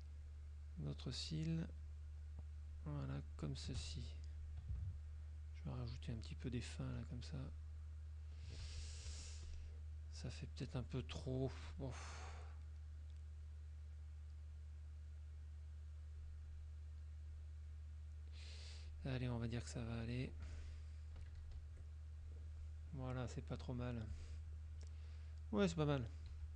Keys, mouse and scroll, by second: 0.4 shift+click, 0.9 shift+click, 1.4 shift+click, 2.0 shift+click, 2.7 shift+click, 3.4 shift+click, 5.0 shift+click, 6.0 shift+click, 7.6 shift+click, 9.2 F2, 9.6 click, 11.8 click, 12.4 click, 13.5 click, 14.6-16.4 drag, 16.6 click, 17.4 click, 19.0 click, 19.5 click, 20.6 F1, 23.6 click, 24.2 click, 26.4 z.